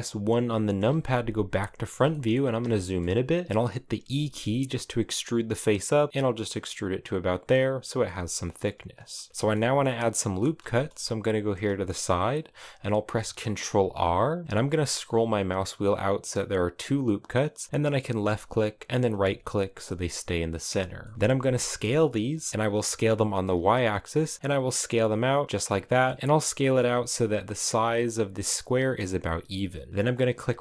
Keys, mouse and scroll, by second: 0.4 KP_1, 1.1-1.6 scroll up 2, 1.7 shift+middle click, 2.1 scroll up 2, 2.4-3.8 shift+middle drag, 3.8 e, 7.5 scroll down 2, 7.7-9.2 middle drag, 9.2 scroll up 1, 9.3-10.5 middle drag, 10.5 scroll down 2, 13.5 ctrl+r, 19.9-20.7 scroll up 1, 20.7 middle click, 21.1 s, 25.5 middle click, 25.7-26.1 scroll up 2, 26.1 right click, 29.4 scroll down 2, 29.6-30.6 middle drag.